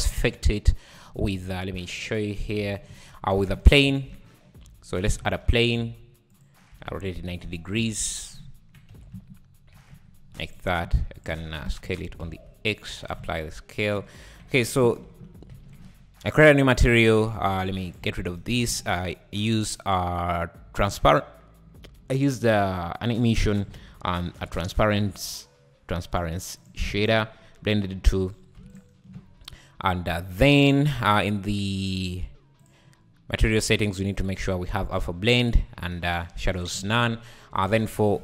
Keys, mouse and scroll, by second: 0.0 space, 0.3 scroll down 1, 0.5 `, 1.0-1.3 scroll up 5, 1.3 z, 2.0 click, 2.4 `, 2.9 `, 3.6 shift+right click, 3.9 shift+a, 4.9-6.4 drag, 5.2 shift+a, 6.4 shift+a, 6.7 r, 8.4 `, 8.9 click, 8.9 r, 10.8 s, 11.6 s, 13.2 ctrl+a, 13.8 ctrl+a, 15.1 /, 16.1-17.1 scroll up 4, 16.4-16.8 drag, 17.5-17.9 scroll down 6, 17.9 click, 18.1 x, 18.7 shift+a, 23.7 shift+a, 27.1-28.1 right drag, 28.1 click, 28.8 ctrl+shift+click, 29.6 `, 32.7 click, 33.5-35.9 drag, 36.8 shift+a.